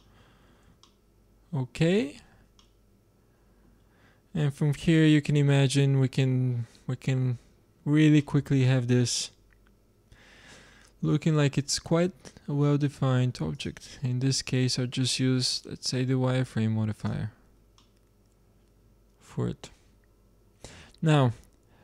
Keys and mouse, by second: 0.2-2.8 middle drag, 7.0 Tab, 13.5-16.9 drag, 17.7-18.1 middle drag, 18.1-18.6 drag, 18.6-19.7 middle drag.